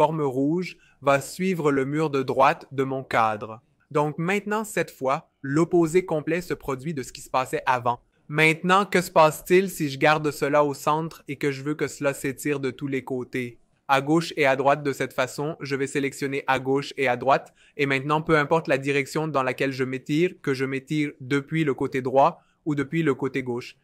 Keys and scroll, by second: 10.1 alt+v, 10.4 alt+j.